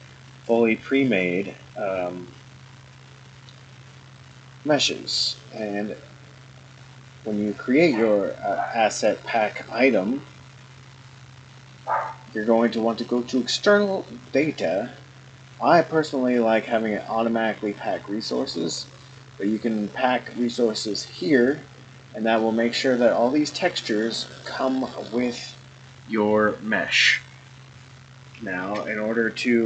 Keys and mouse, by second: 4.2-21.8 drag, 22.3-25.0 middle drag, 28.6 ctrl+s.